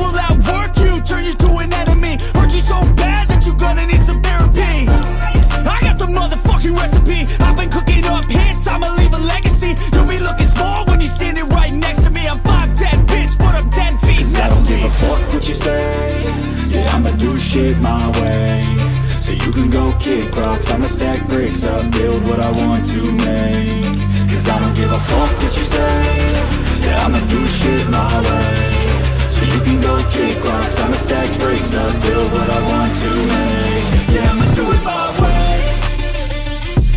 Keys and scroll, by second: 3.0 ], 3.5 [, 5.5 ], 8.9-11.3 typing, 35.0 ctrl+i.